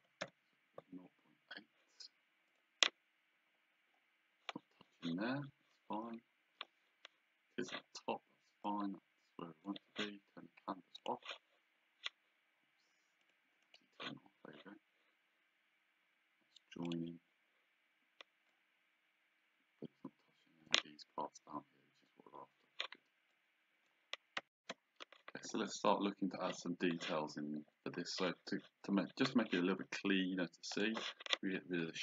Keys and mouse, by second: 0.0 KP_Decimal, 0.2 KP_8, 2.5 click, 8.7 click, 11.0 click, 13.2 click, 16.9 click, 18.5 click, 23.3 click, 24.6 shift+z, 30.7 click.